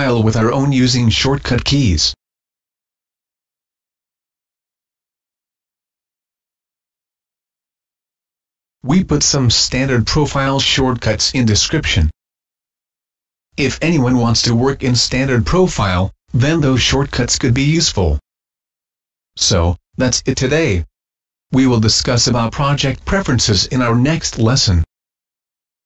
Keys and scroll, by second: 0.6 Escape, 3.9 ctrl+shift+g, 5.5 Escape.